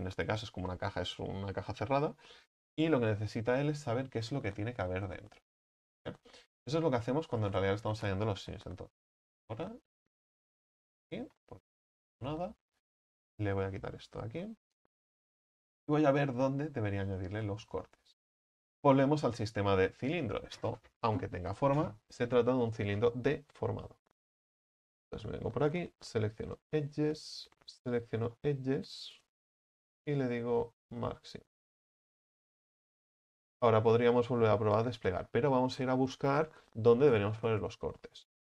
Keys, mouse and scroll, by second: 5.3 ctrl+z, 5.5 ctrl+z, 5.7 ctrl+z, 5.9 ctrl+z, 6.2 ctrl+z, 6.5 ctrl+z, 6.7 ctrl+z, 7.4-8.2 scroll up 7, 7.9-8.9 middle drag, 8.9 x, 11.0-12.5 shift+middle drag, 12.5 right click, 13.0 alt+shift+right click, 14.9 x, 15.3 scroll down 2, 15.9-16.7 middle drag, 16.7-17.1 scroll up 1, 17.1 right click, 17.8 alt+shift+right click, 26.6-27.9 drag, 27.9 alt+shift+right click, 28.4-31.6 middle drag, 31.6 u, 32.4 middle click, 33.4 scroll down 1, 33.5 a, 33.7 a.